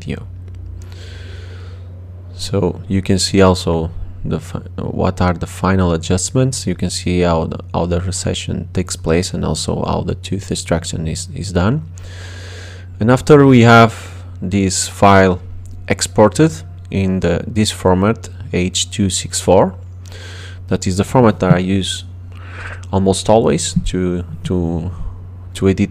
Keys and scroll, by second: 20.1 BackSpace.